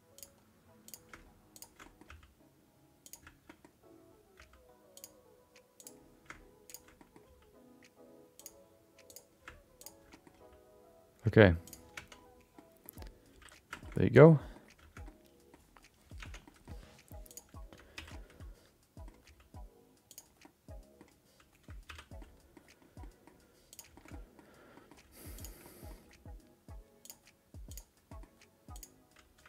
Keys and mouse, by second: 0.8 click, 1.8 middle click, 2.1 g, 3.4 middle click, 4.3 g, 5.7 click, 6.9 middle click, 7.2 g, 9.1 click, 9.8 ctrl+shift+click, 10.1 middle click, 10.3 g, 12.2 Tab, 12.5 middle click, 13.3 alt+z, 13.7 shift+middle click, 13.9 middle click, 15.0 middle click, 16.2 Tab, 16.4 middle click, 17.2 click, 17.9 alt+z, 18.1 middle click, 19.2 g, 20.4 middle click, 21.8 alt+z, 22.2 middle click, 23.0 middle click, 23.7 click, 23.9 shift+middle click, 24.1 middle click, 24.7 middle click, 25.3 shift+click, 25.6 middle click, 26.0 g, 27.7 click, 28.1 middle click, 28.7 click.